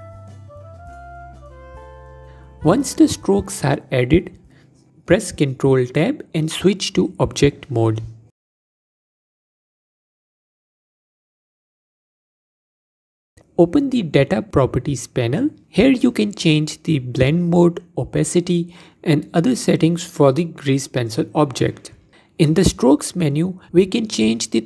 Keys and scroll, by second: 7.5 ctrl+Tab.